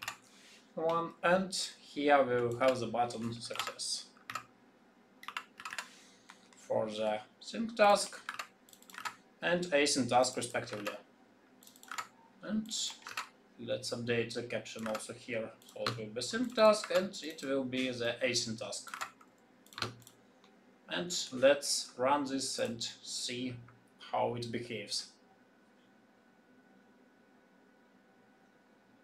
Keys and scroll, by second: 8.3 ctrl+c, 10.7 ctrl+c, 11.8 ctrl+v, 13.0 ctrl+c, 14.8 ctrl+v, 16.8 ctrl+c, 18.9 ctrl+v.